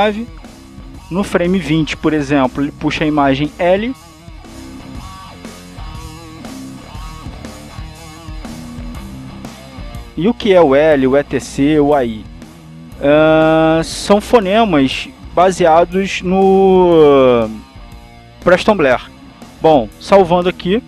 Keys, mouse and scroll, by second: 3.9 click, 4.7-7.8 drag, 8.4-9.9 drag, 14.4 click, 15.5 click, 17.3 click, 19.5 click.